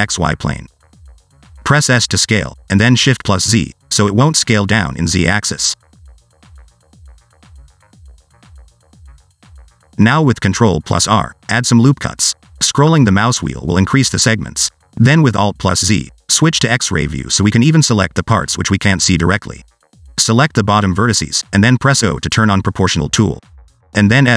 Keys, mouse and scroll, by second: 0.1 click, 0.8-1.5 scroll up 2, 1.5 s, 5.9 scroll up 2, 6.2 shift+middle click, 6.9 Tab, 7.7 ctrl+2, 9.3 Tab, 10.1 ctrl+r, 18.6 1, 20.0 alt+z, 20.3 click, 22.0 o, 22.8 s.